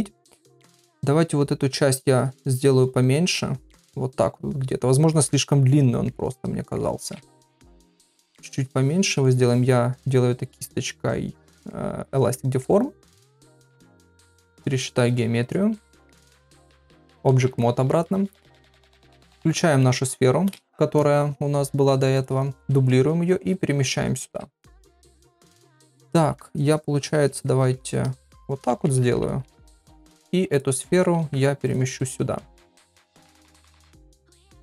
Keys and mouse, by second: 0.6 click, 1.2 click, 1.9 click, 2.4 click, 2.9 click, 3.5 click, 4.3 click, 4.7 click, 5.1-6.1 middle drag, 6.3 middle click, 7.3 shift+click, 8.1 shift+middle click, 8.6 shift+click, 9.2 middle click, 11.7 middle click, 12.4 middle click, 13.2 shift+click, 13.5 shift+click, 13.8 middle click, 14.5 ctrl+r, 15.8 middle click, 16.3 ctrl+Tab, 17.6 ctrl+middle click, 22.2 click, 22.7 shift+d, 24.3 KP_7, 25.7 Tab, 27.1 1, 27.8 shift+s, 28.7 Tab, 29.3 shift+s, 31.2 shift+s, 32.2 s, 33.8 middle click.